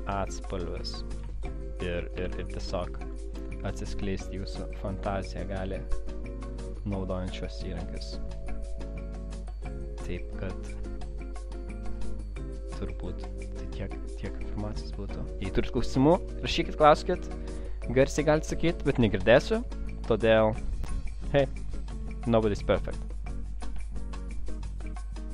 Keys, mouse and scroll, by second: 0.5 click, 1.6 shift+double click, 2.2 ctrl+shift+[, 3.1 shift+double click, 5.9 click, 6.8 click, 13.4 click, 18.4 click, 20.4 click, 20.9 click.